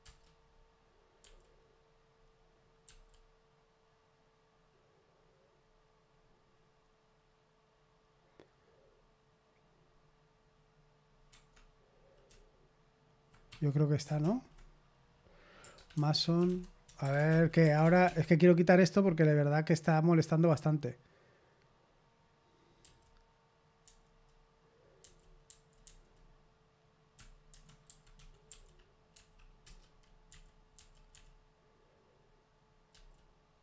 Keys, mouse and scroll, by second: 0.0 Return, 1.1 k, 2.8 u, 11.2 Escape, 13.4 Escape, 14.2 shift+;.